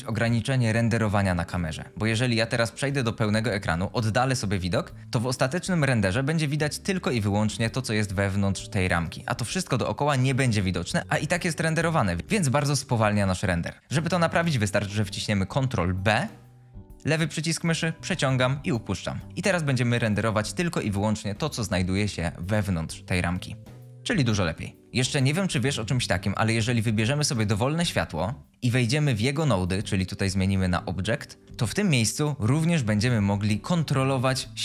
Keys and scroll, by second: 2.5 ctrl+space, 15.8 ctrl+b, 24.1 shift+space.